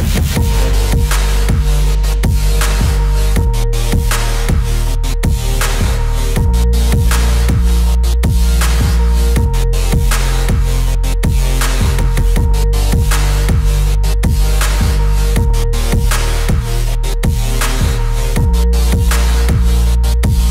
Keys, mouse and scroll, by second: 2.1-8.3 drag, 8.3 space, 9.0 shift+click, 9.9 e, 10.3-17.7 drag.